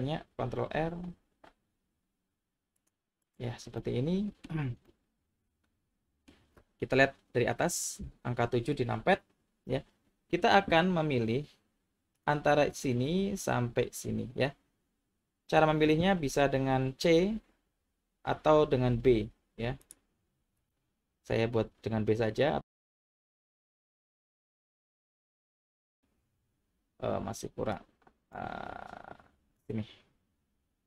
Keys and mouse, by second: 0.3 ctrl+r, 3.2 click, 3.8 middle click, 4.8-6.3 middle drag, 8.0 KP_7, 12.1 click, 17.6 c, 20.6 b, 27.7 click, 29.6-30.8 drag.